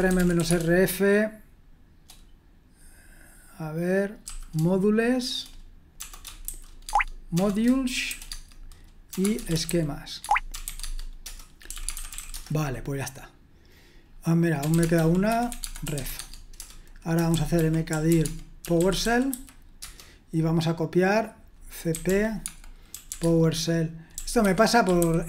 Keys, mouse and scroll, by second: 0.0-0.9 typing, 4.2 ., 6.5 shift+n, 6.8 Tab, 7.4 BackSpace, 8.1 m, 8.3 Tab, 9.1-12.6 typing, 10.2 Tab, 10.8 Tab, 14.4-19.8 typing, 21.7-25.2 typing.